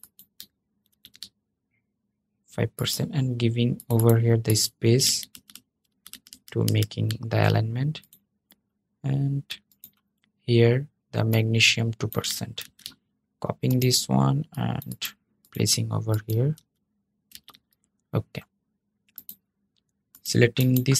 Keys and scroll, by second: 0.6 super+v, 12.4 super+c, 16.2 super+a, 17.1 super+v.